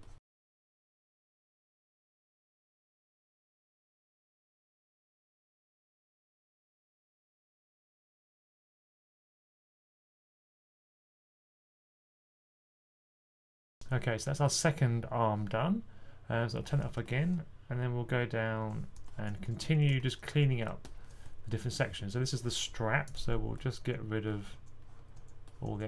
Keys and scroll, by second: 5.7-6.2 typing, 9.2 super+z, 12.9-13.4 typing, 19.1-21.1 typing, 22.9 typing, 24.4 typing, 25.5-25.8 typing.